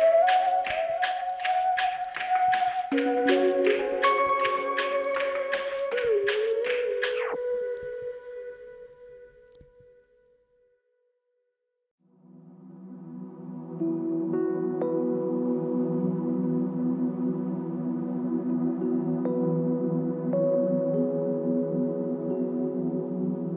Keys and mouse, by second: 0.6 shift+click, 1.5 shift+click, 5.3 space, 9.6 ctrl+click, 11.3 ctrl+click, 18.5-19.8 typing.